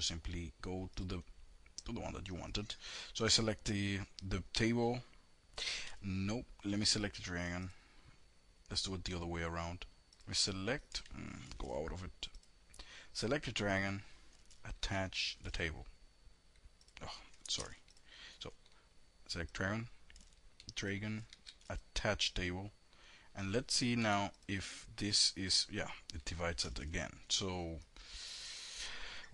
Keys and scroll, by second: 11.0 ctrl+b, 14.3 alt+a, 21.0 shift+a, 23.4 5.